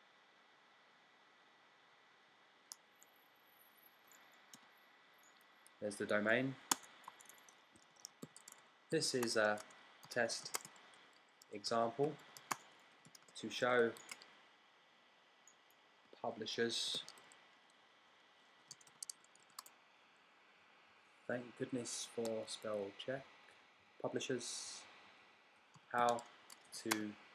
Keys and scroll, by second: 3.4 super+v, 5.0 BackSpace, 7.2 Tab, 7.5 Tab, 8.1-20.0 typing, 21.1-21.8 typing, 26.0-27.3 typing.